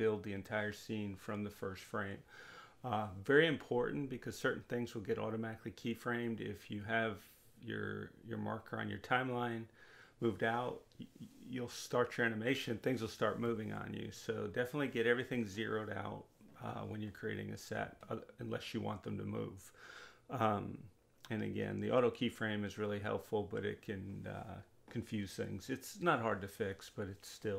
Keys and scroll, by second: 13.1 Delete.